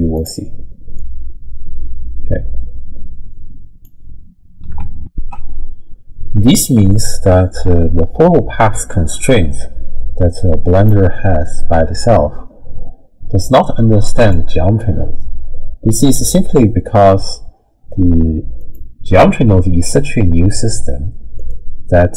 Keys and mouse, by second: 1.0-3.9 drag, 5.0 ctrl+alt+shift+w, 5.1 ctrl+alt+shift+q, 10.8-14.3 drag, 21.4 click.